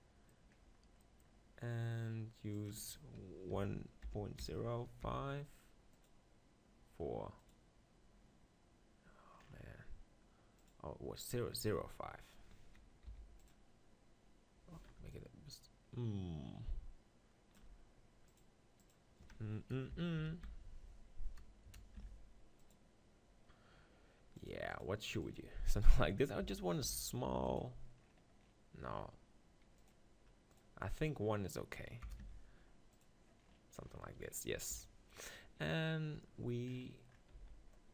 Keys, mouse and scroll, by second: 0.8-3.6 middle drag, 15.3-22.6 drag, 22.6 BackSpace, 28.0 middle click, 28.4-32.9 middle drag, 33.4-34.7 middle drag, 34.7 KP_7, 37.3 z.